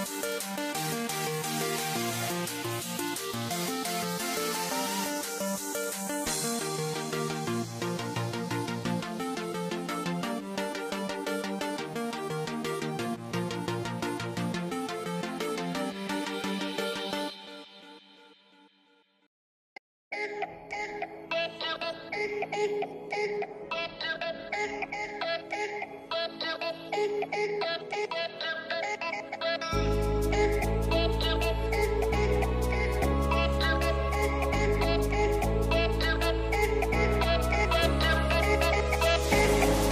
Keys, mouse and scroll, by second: 7.3 ctrl+r, 10.1 click, 12.8-15.7 shift+middle drag, 15.7 Tab, 18.5 ctrl+k, 21.5 k, 24.4 g, 27.4 Tab.